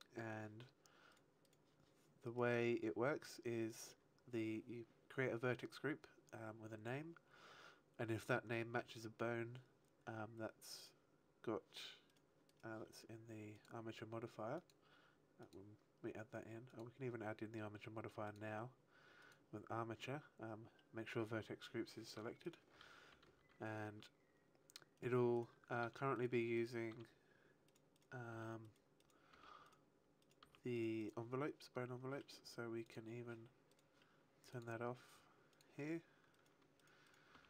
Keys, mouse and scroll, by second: 1.0 right click, 1.4 right click, 2.2 right click, 3.6 click, 12.0 right click, 13.0 right click, 13.5 click, 15.3 click, 18.2 click, 22.4 right click, 23.0 r, 24.9 right click, 25.3 right click, 25.8 r, 26.2 right click, 26.5 right click, 26.8 r, 27.7 right click, 27.9 right click, 28.2 r, 28.7 right click, 28.9 right click, 29.2 r, 29.6 right click, 30.1 right click, 30.9 right click, 32.8 click, 33.6 right click, 34.4 click, 35.6 click, 36.3 right click, 37.0 right click, 37.3 r.